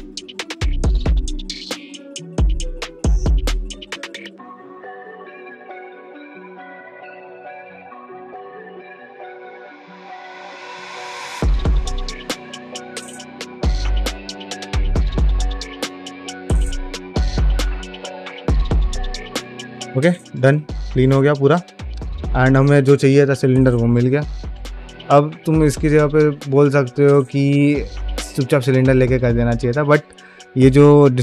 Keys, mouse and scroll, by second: 0.0 ctrl+x, 0.1 click, 0.2 shift+middle click, 0.4 click, 0.6 click, 0.7 click, 0.9 ctrl+x, 1.0 2, 1.1 alt+click, 1.2 middle click, 1.3 click, 1.4 scroll down 1, 1.4 middle click, 1.5 middle click, 1.8 ctrl+click, 1.9 shift+middle click, 2.1 scroll up 1, 2.3 ctrl+x, 2.4 1, 2.8 ctrl+x, 2.8-3.1 scroll down 2, 2.8 middle click, 3.0 middle click, 3.1 shift+middle click, 3.2-3.6 scroll up 7, 3.3 alt+middle click, 3.6 middle click, 3.7 alt+shift+middle click, 4.0 click, 4.0 scroll down 1, 4.1 middle click, 4.4 shift+click, 5.0 m, 5.2 middle click, 5.5 shift+e, 5.7 shift+click, 5.9 shift+r, 5.9 middle click, 6.1 click, 6.3 shift+r, 6.4 shift+middle click, 6.7 click.